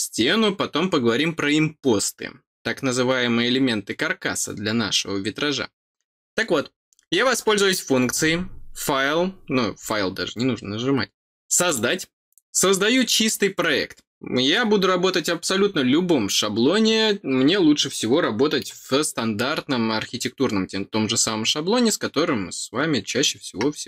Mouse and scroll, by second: 11.6 click.